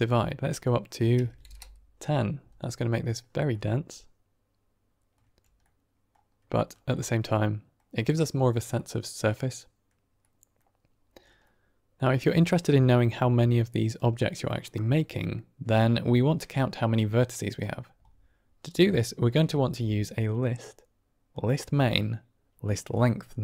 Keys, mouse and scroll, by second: 0.0-2.1 drag, 2.5-3.0 middle drag, 3.4 middle drag, 3.6 click, 4.0-5.0 middle drag, 5.3 scroll up 1, 5.5-6.0 middle drag, 6.5 shift+middle drag, 6.9-7.7 middle drag, 8.7-9.8 middle drag, 10.2 middle drag, 11.3 middle click, 12.6-13.9 drag, 15.0 middle click, 16.3-17.5 drag, 19.4 shift+a.